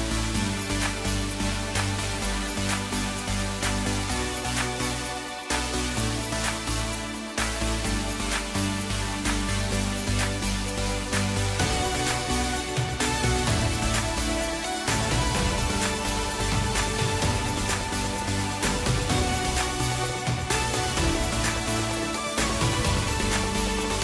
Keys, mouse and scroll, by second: 1.6-2.3 scroll up 3, 2.9 click, 4.0 shift+click, 5.0 shift+click, 6.4 shift+click, 11.7-12.1 scroll down 3, 12.3-13.7 middle drag, 13.7 e, 16.6-16.9 scroll down 1, 17.1-18.6 middle drag, 18.6 KP_3, 19.6-20.0 scroll up 1, 20.4 Tab, 21.2 g.